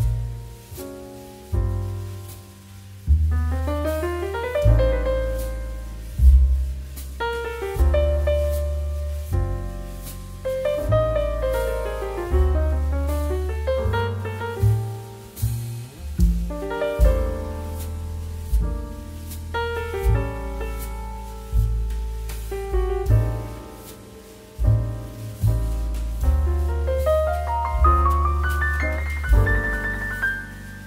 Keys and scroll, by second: 2.0 KP_2, 2.1 KP_5, 4.2 KP_2, 4.3 KP_5, 9.6 ctrl+k, 10.7 w, 10.9 2, 12.1 Delete, 15.9 ctrl+[, 17.8 ctrl+h, 20.1 Delete, 20.4 space, 28.4 space, 28.9 z.